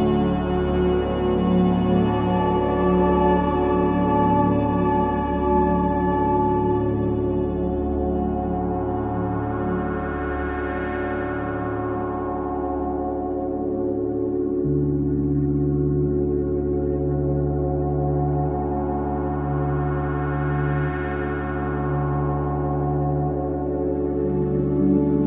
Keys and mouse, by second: 0.3 g, 4.0 click, 4.7 g, 6.8 click, 7.5 g, 13.6 Tab, 17.1 shift+a, 22.5 g.